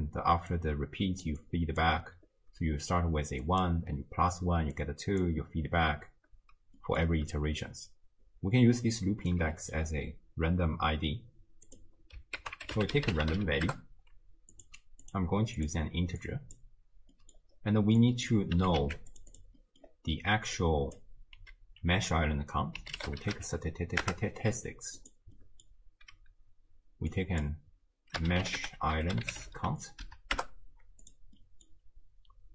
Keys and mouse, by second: 0.0-7.3 typing, 0.5 click, 1.4 click, 3.5 click, 4.8 click, 6.8 drag, 7.6-9.3 drag, 9.3 d, 9.6 drag, 12.4 ctrl+a, 15.1-15.7 drag, 16.2-16.6 drag, 17.2 middle click, 18.0 click, 18.6 g, 19.4 click, 19.6 middle drag, 20.6-25.2 drag, 25.4-25.7 middle drag, 27.2-31.2 drag, 31.4-31.7 middle drag.